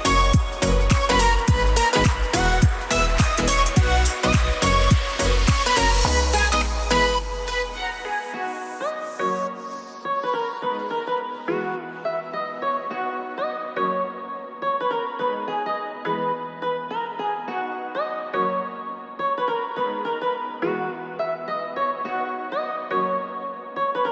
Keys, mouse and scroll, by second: 1.5 click, 2.5-2.9 drag, 4.1-5.5 drag, 5.9-7.6 drag, 7.9 shift+middle click, 9.7 click, 13.3 click, 14.0 click, 14.8 click, 17.5 click, 21.8-24.1 drag.